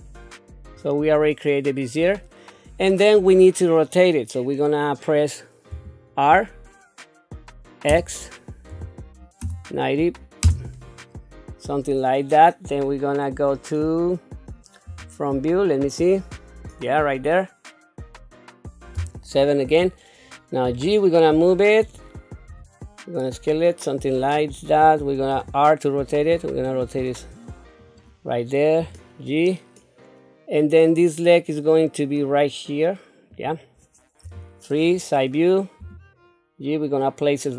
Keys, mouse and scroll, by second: 5.7 r, 14.9 KP_1, 18.9 KP_7, 20.7 g, 22.5 s, 25.3 r, 28.8 g, 34.2 KP_3, 35.8 g.